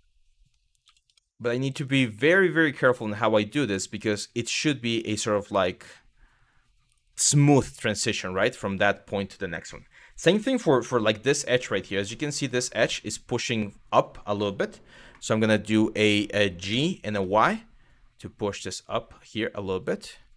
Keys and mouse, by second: 0.5 g, 2.6 click, 2.9-3.9 middle drag, 4.3 middle click, 4.9 shift+middle click, 5.3-6.3 middle drag, 7.3 middle click, 8.1 shift+middle click, 9.7 click, 10.4 2, 11.3 click, 11.7 click, 12.6-14.4 middle drag, 16.3 g, 16.7 y.